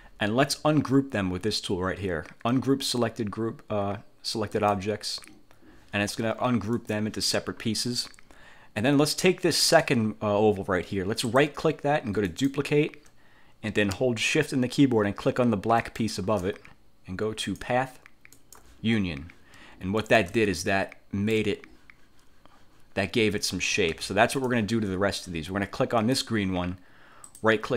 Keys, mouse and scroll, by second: 4.7 click, 6.9 click, 9.7 click, 11.3 click, 12.3 click, 15.9 shift+click, 17.5 click, 18.4 click, 20.1 shift+click, 20.7 ctrl+shift+click, 24.1 ctrl+z, 24.5 ctrl+click, 26.1 click, 27.4 click.